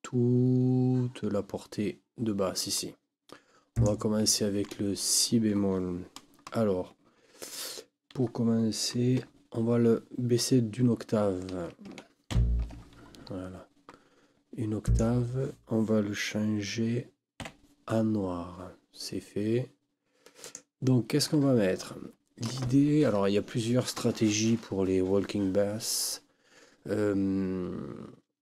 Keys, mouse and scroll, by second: 3.7 click, 12.3 ctrl+Down, 14.8 click, 17.4 KP_5, 20.4 click.